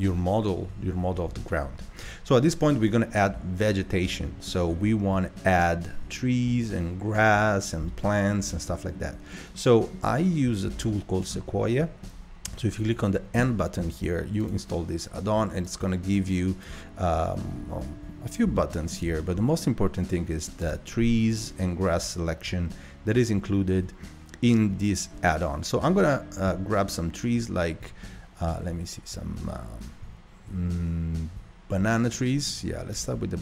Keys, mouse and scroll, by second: 4.0 middle click, 4.8-5.1 scroll down 1, 5.5 scroll up 1, 7.4-7.9 scroll up 1, 7.9-9.2 shift+middle drag, 9.2-9.5 scroll down 2, 9.5-10.3 middle drag, 10.3 scroll down 1, 10.9-11.3 shift+middle drag, 11.3-11.8 scroll up 1, 13.4 n, 14.4 click, 15.6-18.6 drag, 18.6-20.6 shift+middle drag, 20.6-23.7 drag, 23.7-33.4 middle drag.